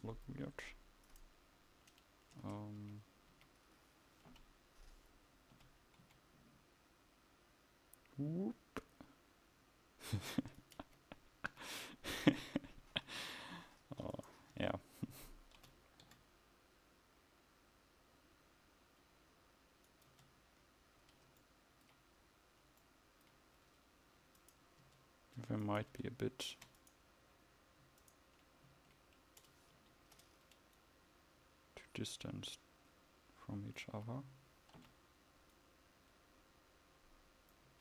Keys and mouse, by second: 2.5 Tab, 2.9 a, 4.4 l, 5.6 g, 10.9 Tab, 11.6 a, 14.6 Tab, 15.6 g, 20.2 Tab, 24.9 Tab, 29.9 ctrl+z, 34.1 a, 34.9 l.